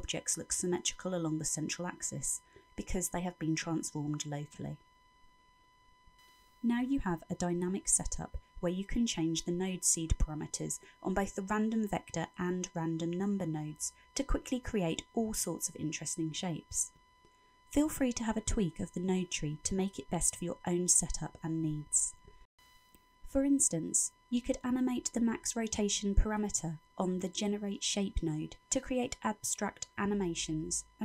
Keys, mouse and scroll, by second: 5.6-6.6 scroll up 2, 6.7 shift+middle click, 8.5 middle click, 10.7-11.4 scroll up 4, 11.4 middle click, 12.2-12.6 scroll up 4, 12.9 middle click, 14.8 shift+click, 19.6 shift+click, 21.6 middle click, 22.3 scroll down 3.